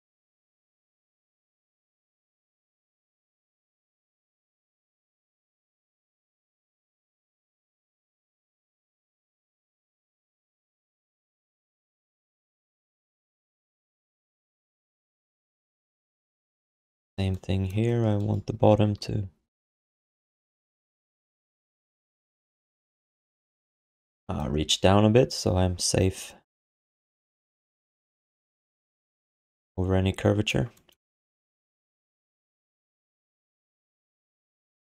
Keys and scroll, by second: 0.7 q, 1.4 alt+shift+d, 1.9 w, 3.7-5.0 typing, 6.5 BackSpace, 6.5 Return, 8.8 s, 12.4 alt+shift+d, 12.8 ctrl+s, 13.1 1, 18.5 alt+q, 20.4 q, 23.9 w, 27.5 q, 28.2 w, 31.4 q, 31.9 w, 33.7 q, 34.4 w.